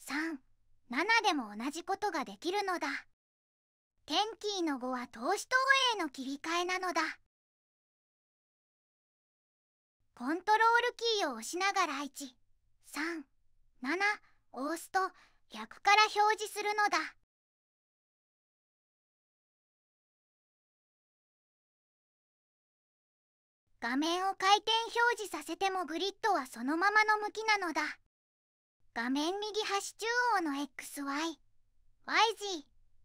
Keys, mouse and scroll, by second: 0.5 3, 2.0 7, 5.0 5, 7.1 5, 11.4 1, 13.4 ctrl+1, 16.9 3, 18.1 ctrl+3, 20.0 7, 21.5 ctrl+7.